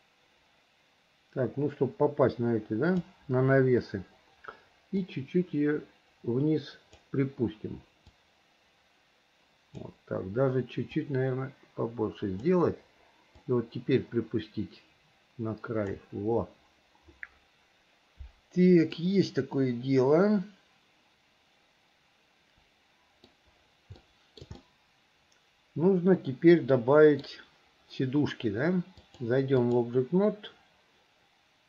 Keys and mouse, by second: 5.1 click, 5.9-7.2 drag, 8.3-10.0 drag, 11.0 click, 11.3-12.6 drag, 13.7-16.1 drag, 19.1-23.5 middle drag, 24.2 shift+middle click, 24.8-27.5 middle drag, 29.1 click.